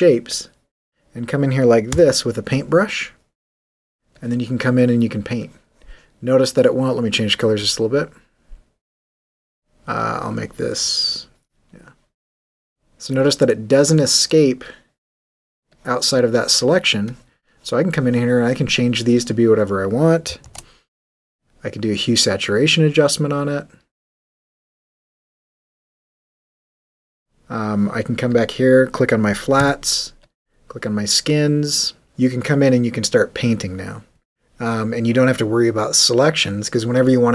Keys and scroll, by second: 1.9 b, 20.4 super+u, 29.6 w, 35.7 b.